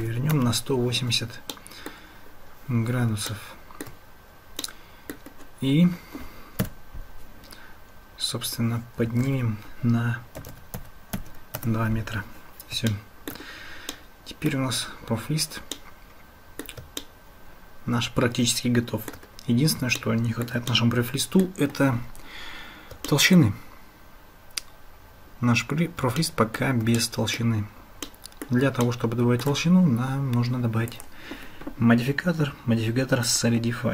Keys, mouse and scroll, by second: 1.5-2.0 drag, 3.3-3.9 shift+drag, 4.7-5.2 middle drag, 6.6 KP_Decimal, 9.1 g, 12.9-13.3 shift+drag, 14.0-14.6 drag, 15.8 middle click, 16.0 click, 16.2 middle click, 16.4 click, 17.0-19.2 shift+drag, 20.0-20.5 shift+middle drag, 20.7 middle click, 23.1 shift+middle click, 26.2-26.7 shift+middle drag, 27.0 middle click, 28.1 middle click, 28.8-29.5 shift+middle drag, 31.1-33.4 drag.